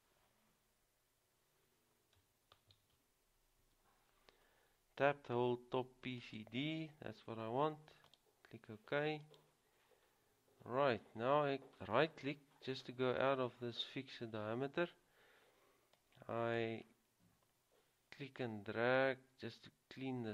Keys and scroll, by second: 2.9-3.8 typing.